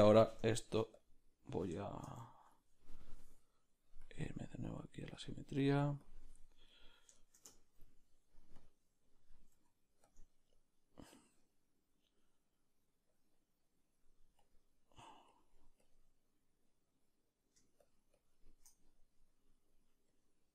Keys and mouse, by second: 1.1 Tab, 1.1 b, 1.9-7.5 shift+middle drag, 8.7-20.5 drag, 10.1 f, 10.2 ctrl+middle click.